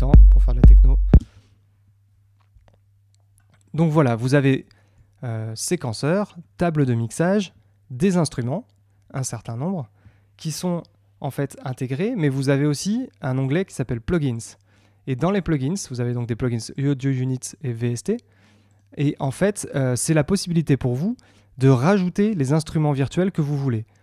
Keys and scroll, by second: 1.1 space.